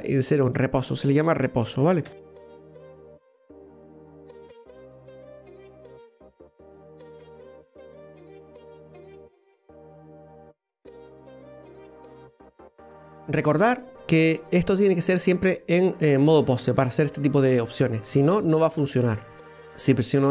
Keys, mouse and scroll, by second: 2.1 KP_1, 2.8 right click, 3.3 shift+right click, 3.7 ctrl+shift+c, 4.1 right click, 4.7 click, 5.3 right click, 6.0 ctrl+shift+r, 6.7 ctrl+shift+c, 7.1 click, 7.6 right click, 7.9 shift+right click, 8.1 ctrl+shift+c, 8.7 click, 9.3 shift+right click, 9.6 ctrl+shift+c, 9.9 click, 10.4 right click, 10.7 ctrl+shift+c, 11.1 click, 11.7 right click, 11.8 ctrl+right click, 12.0 shift+right click, 12.2 ctrl+shift+c, 12.8 click, 13.5-16.5 shift+middle drag, 18.5 right click, 19.4 middle click, 19.4 right click.